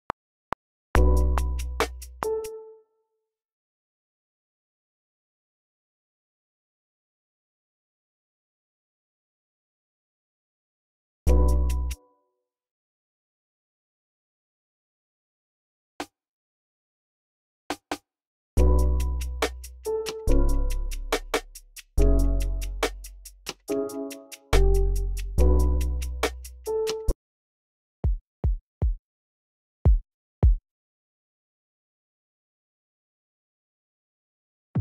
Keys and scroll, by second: 1.7-3.7 typing, 2.5 super+k, 6.0-6.7 typing, 9.8 ctrl+super+r, 10.3 super+z, 11.7 space, 12.2 x, 12.9 s, 14.8 typing, 17.6-19.7 typing, 20.1 alt+super+s, 23.9-25.8 typing, 27.3 v, 27.7 super+k, 28.3 a, 28.7 a, 29.7 a, 30.3 a, 31.0 super+k, 32.6 v, 33.9-34.8 typing.